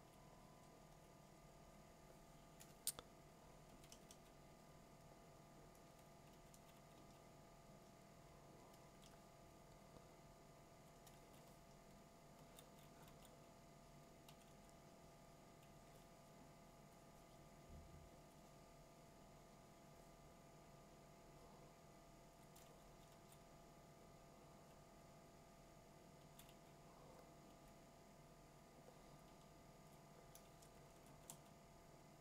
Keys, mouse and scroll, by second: 0.1 click, 3.9 2, 6.3 ], 6.6 ], 7.0 ], 10.8 ctrl+click, 12.0 2, 12.6 4, 12.9 5, 14.5 2, 16.9 ctrl+click, 18.3 click, 22.4 click, 23.1 2, 25.3 2, 26.5 [, 27.5 [, 29.9-32.2 drag, 31.1 2, 31.3 3.